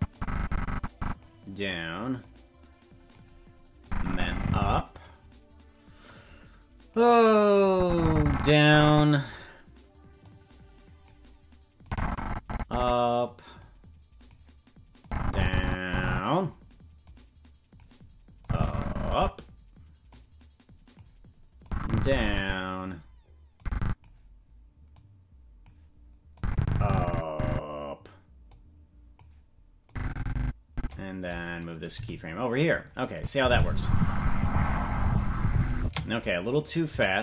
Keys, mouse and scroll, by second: 0.1-1.2 drag, 2.1-3.1 drag, 3.8-5.0 drag, 6.0 click, 7.7-9.0 drag, 10.2 click, 11.8 click, 13.6 click, 15.0-16.2 drag, 17.0 click, 18.4 click, 20.1 click, 21.6 click, 23.5 click, 24.9 click, 26.3-27.6 drag, 28.4 click, 29.8-30.9 drag, 31.2 right click, 31.9 g, 33.1 click, 33.3 space, 35.8 space, 36.6 right click, 36.8 c.